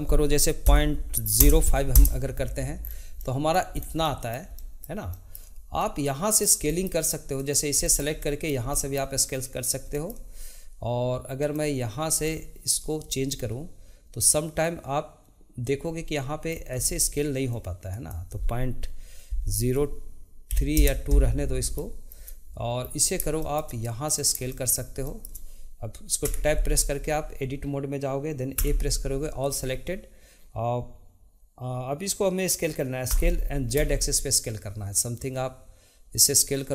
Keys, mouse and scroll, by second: 2.8-3.1 scroll down 2, 3.2-3.7 middle drag, 3.7 scroll up 2, 4.0-7.4 shift+middle drag, 7.4 click, 7.8-11.4 shift+middle drag, 11.4 click, 12.3-14.2 shift+middle drag, 14.2-16.8 drag, 16.8 ctrl+z, 17.9-20.9 drag, 21.8-22.9 shift+middle drag, 22.9-23.4 scroll down 2, 23.4-24.0 shift+middle drag, 24.0 click, 24.5-26.2 shift+middle drag, 26.2 Tab, 28.5 a, 33.1 s.